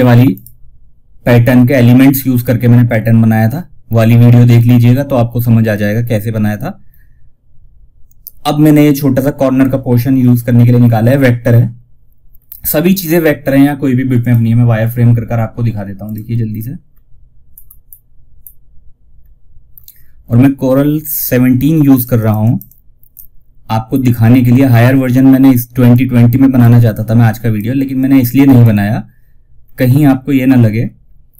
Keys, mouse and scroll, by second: 2.2 scroll down 1, 8.9-9.6 scroll down 1, 11.7-12.1 scroll down 1, 11.7 typing, 13.4 click, 16.2-16.8 scroll down 1, 17.1 scroll up 1, 18.6-19.1 scroll down 1, 21.2 click, 23.2 scroll up 1, 25.2-28.9 drag, 27.6 typing, 28.9 scroll down 1, 30.8 click.